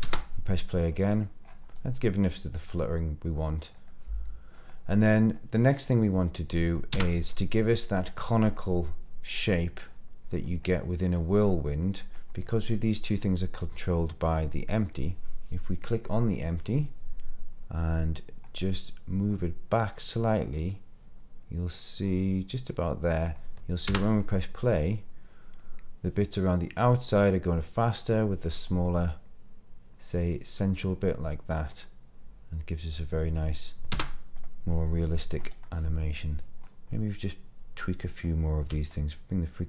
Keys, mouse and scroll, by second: 0.0 space, 0.5-1.2 middle drag, 1.4 scroll up 1, 1.7-2.2 middle drag, 2.4-2.7 scroll down 3, 2.7-3.7 middle drag, 3.8-4.6 middle drag, 4.7-5.3 middle drag, 5.6 scroll up 1, 5.8-6.7 middle drag, 6.9 space, 7.3-7.7 scroll down 3, 7.7-8.0 middle drag, 8.8-9.4 middle drag, 9.8-10.5 scroll down 5, 10.6 middle click, 11.8 middle click, 16.3 click, 18.4-19.3 middle drag, 19.8 click, 23.3-23.8 middle drag, 23.8 space, 24.2-25.6 middle drag, 28.5-29.1 middle drag, 30.8-32.9 middle drag, 33.9 space, 34.3 click, 35.3 scroll up 2, 35.6 middle click, 36.6 scroll up 2, 36.9-38.2 middle drag, 38.9-39.6 shift+drag.